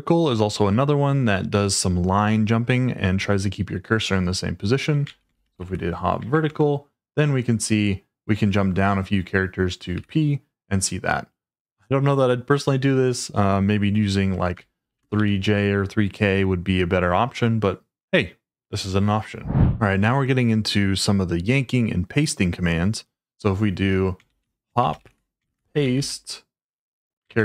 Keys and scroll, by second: 5.0-6.3 typing, 6.3 Tab, 6.4 Return, 7.5-8.2 typing, 9.9 p, 14.8-15.1 typing, 24.2-26.4 typing, 27.3 Tab.